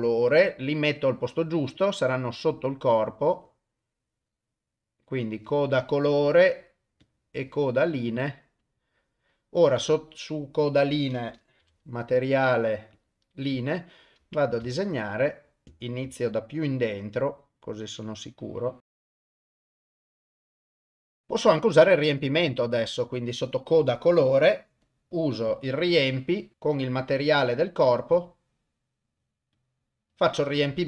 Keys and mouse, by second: 2.4 click, 2.6 click, 3.0 click, 3.5 click, 4.3-4.7 drag, 7.9 click, 8.2 click, 8.6 click, 11.6 u, 14.7 shift+click, 15.6 ctrl+z, 16.2-20.1 shift+drag, 20.9 click, 22.2 click, 24.8 click, 26.5 u, 27.9-29.7 drag.